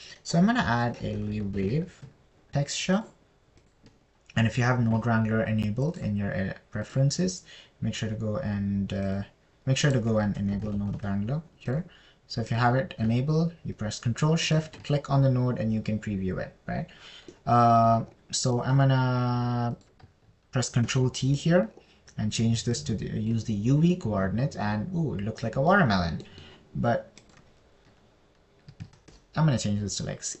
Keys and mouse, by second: 0.4 shift+a, 7.5-8.6 drag, 20.0 middle click, 21.2 click, 22.4 ctrl+t, 24.1 click, 28.8-30.4 middle drag.